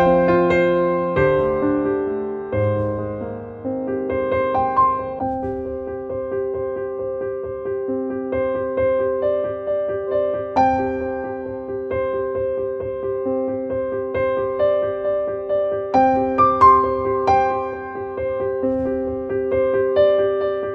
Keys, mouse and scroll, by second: 2.9-9.0 drag, 9.9 click, 10.1 click, 11.1 click, 11.9 click.